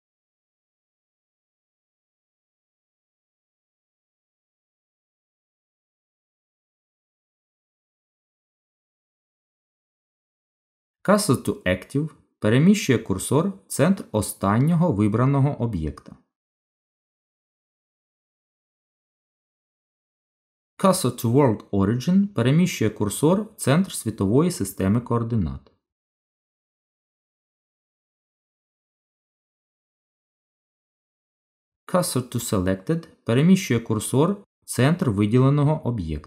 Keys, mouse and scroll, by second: 4.4 click, 5.8 shift+click, 6.9 click, 9.6 shift+s, 16.5 click, 19.3 shift+s, 27.2 click, 30.0 shift+s.